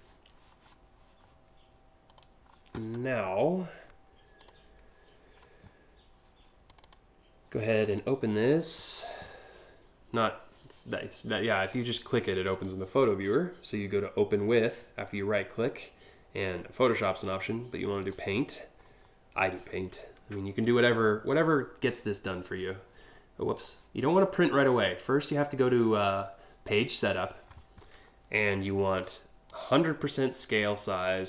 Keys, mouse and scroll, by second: 1.6 click, 4.0 click, 6.2 click, 7.4 click, 7.6 click, 11.2 click, 12.1 right click, 17.6 click, 20.2 click, 21.5 click, 23.1 click, 24.2 click, 26.2 click, 29.1 click.